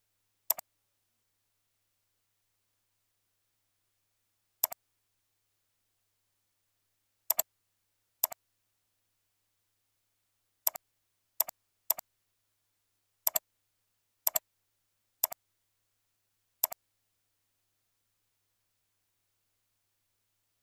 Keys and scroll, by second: 0.9 ctrl+e, 1.8 ctrl+a, 8.1 ctrl+c, 8.9 ctrl+v, 9.3 ctrl+v, 11.4 ctrl+v, 17.9 ctrl+a, 18.3 ctrl+e.